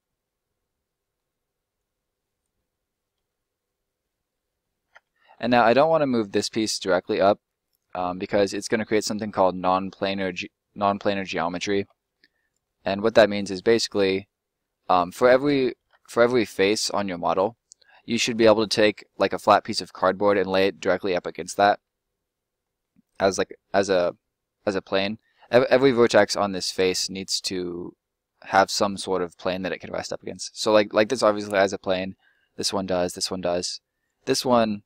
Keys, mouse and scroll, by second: 1.7 click, 2.5 middle click, 4.5 ctrl+middle click, 5.1 scroll up 1, 5.4 middle click, 6.7 click, 7.4 middle click, 10.9 middle click, 11.3-11.8 scroll up 1, 11.8 alt+middle click, 13.5 scroll up 1, 13.6 middle click, 15.3 right click, 16.6 click, 16.8 right click, 17.1 middle click, 31.8 right click, 32.2 middle click, 32.8 right click, 33.1 middle click, 33.9 right click, 34.2 middle click.